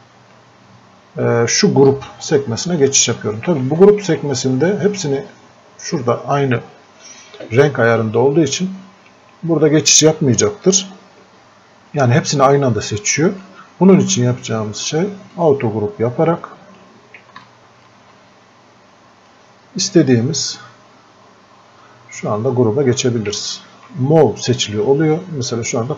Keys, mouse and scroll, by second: 2.8 click, 13.2-21.6 drag, 23.4 ctrl+Num_Lock, 23.4-25.9 drag.